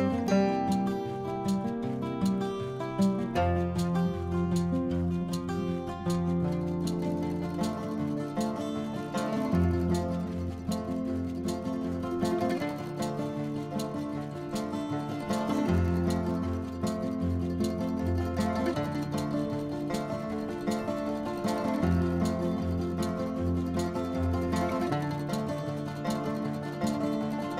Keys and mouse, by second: 0.1 click, 2.7 click, 3.7 click, 4.0 0, 4.3 click, 5.0 click, 5.3 middle click, 6.1 click, 6.2 g, 6.3 z, 6.4 click, 6.6 click, 6.7 g, 6.8 z, 7.0 click, 7.1 click, 7.2 Tab, 7.3 middle click, 7.7 click, 7.7 click, 7.8 Tab, 7.9 click, 8.0 click, 8.0 Tab, 8.1 Tab, 8.2 click, 8.3 middle click, 8.4 click, 8.5 click, 8.6 Tab, 8.7 click, 8.8 click, 8.9 Tab, 9.0-10.5 typing, 9.1 middle click, 9.4 click, 9.9 click, 10.2 click, 10.7 click, 10.8 click, 11.0 middle click, 11.5 middle click, 11.7 click, 12.0 click, 12.1 click, 12.2 middle click, 12.4 r, 12.7 click, 12.9 click, 13.2 r, 13.4 click, 13.5 middle click, 13.5 r, 13.8 Tab, 13.8 click, 14.3 click, 14.5 click, 14.5 click, 14.6 middle click, 14.9 click, 15.0 Tab, 15.1 click, 15.2 click, 15.4-16.6 typing, 15.6 click, 15.9 click, 16.1 click, 16.2 click, 17.0 click, 17.1 click, 17.6 click, 18.0-18.6 typing, 18.2 click, 18.5 click, 18.7 click, 18.8 click, 18.9 middle click, 19.1 Tab, 19.1 click, 19.6 click, 19.6 middle click, 19.8 middle click, 19.9 middle click, 20.3 Tab, 20.3 click, 21.7 click, 22.4 middle click, 23.9 click, 25.0 click, 25.6 Tab, 26.1 middle click, 26.8 middle click.